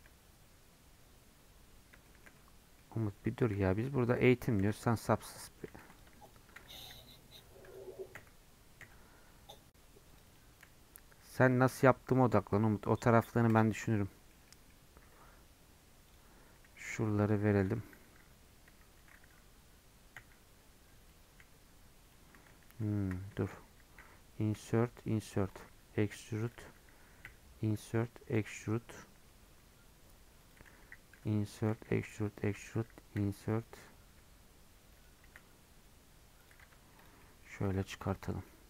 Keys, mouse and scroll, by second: 1.5-2.0 scroll up 3, 2.0 shift+middle click, 2.8-3.4 scroll up 3, 3.4-4.6 shift+middle drag, 4.6 ctrl+r, 5.8 3, 6.0 click, 8.2 i, 11.3-13.8 right drag, 13.8-14.9 middle drag, 14.9-15.2 scroll up 1, 15.2 s, 22.5 ctrl+z, 22.7 ctrl+z, 24.0 i, 36.7 scroll down 2, 37.0 click, 37.2 middle click, 37.6 click, 38.1 right click, 38.3 middle click, 38.4 scroll up 2.